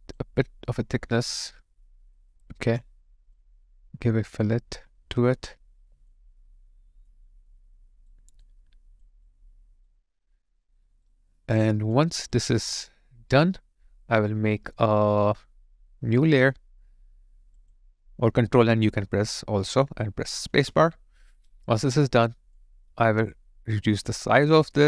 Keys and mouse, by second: 7.3 alt+right click, 8.4 alt+click, 9.3 alt+right click, 10.2 alt+middle click, 10.6 alt+right click, 11.4 alt+middle click, 11.9 alt+click, 20.5 space.